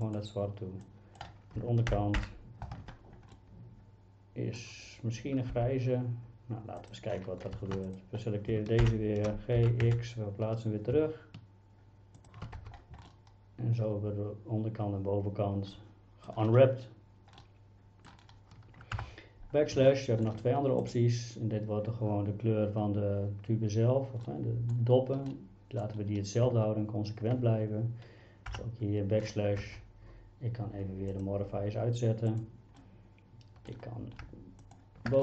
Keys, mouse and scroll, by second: 0.1 click, 1.0 drag, 1.9 ctrl+;, 2.2 ctrl+l, 3.4-4.6 middle drag, 5.6 g, 6.8 click, 8.8 ctrl+l, 9.6 g, 9.9 x, 12.2 shift+click, 12.6 Tab, 13.1-16.3 middle drag, 17.4-18.1 middle drag, 19.0 KP_Divide, 19.9-20.3 shift+middle drag, 20.8 click, 24.3-24.7 middle drag, 25.3-25.8 middle drag, 28.5 KP_Divide, 29.6 Tab, 32.3 click, 32.8 middle click, 34.6 alt+click.